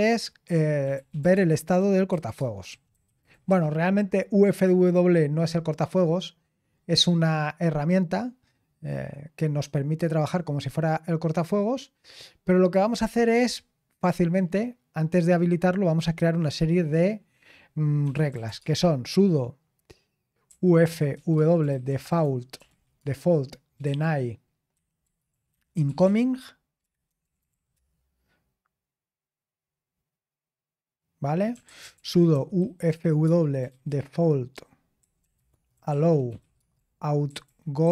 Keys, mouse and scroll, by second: 0.6-4.1 typing, 6.6-8.7 scroll down 1, 8.7-12.3 scroll down 1, 12.3-15.8 scroll down 1, 15.8-17.3 scroll down 1, 17.3-18.0 scroll down 1, 17.8-19.0 typing, 20.2-28.0 typing, 31.3-37.9 typing.